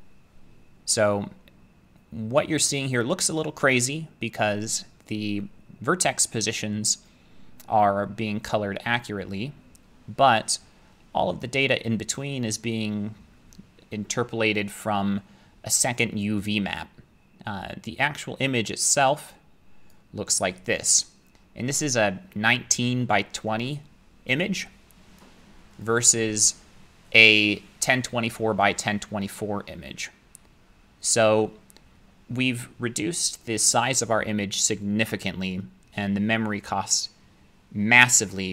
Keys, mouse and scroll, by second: 2.9 middle click, 5.1 middle click, 5.2 middle click, 19.9 click, 24.5-24.9 scroll, 25.6-28.8 scroll.